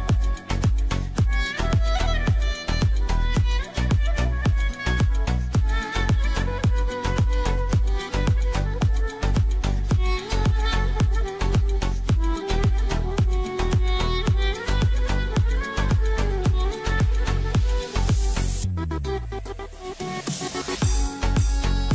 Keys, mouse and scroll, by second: 1.1 click, 6.2 click, 8.9-11.6 drag, 11.6 click, 12.6-15.2 drag, 17.6 click, 18.8-21.4 drag, 21.7 click.